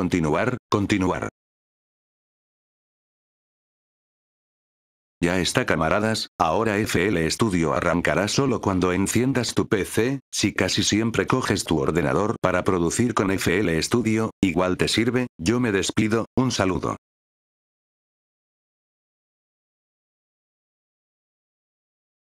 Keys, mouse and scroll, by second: 0.2 click, 4.7 F8, 5.0 click, 15.7 click, 16.8 click, 18.5 click.